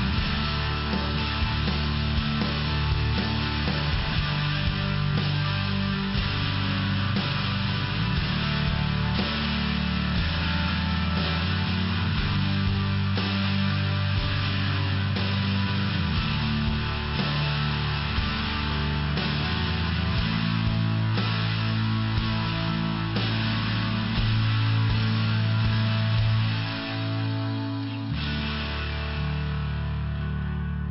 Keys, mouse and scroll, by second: 1.6 click, 2.7 click, 3.3 click, 4.0 click, 5.4 click, 6.4 click, 10.0 click, 10.1 click, 14.3 click, 19.7 typing, 20.4 click, 26.7 click, 28.2 click.